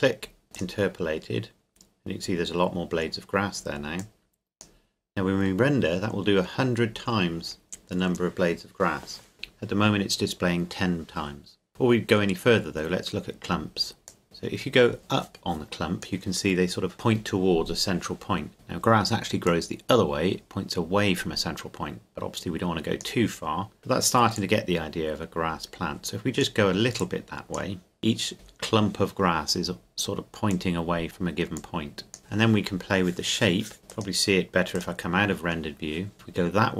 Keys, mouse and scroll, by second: 0.5 click, 4.0 click, 14.1 click, 19.4 click, 30.5 click.